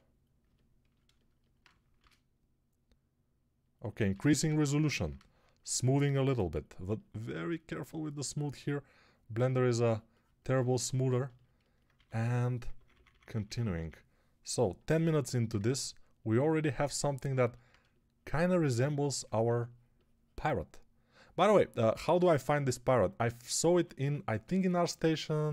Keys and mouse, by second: 1.8 shift+r, 4.2 ctrl+r, 11.8-13.6 typing, 19.3 2, 23.6 1.